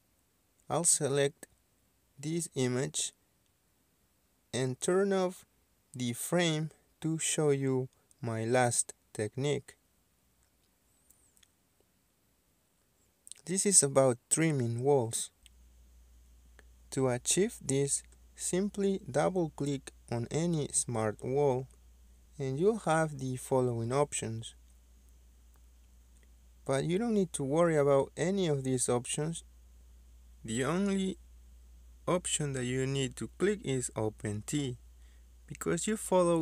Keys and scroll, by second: 5.0 Escape.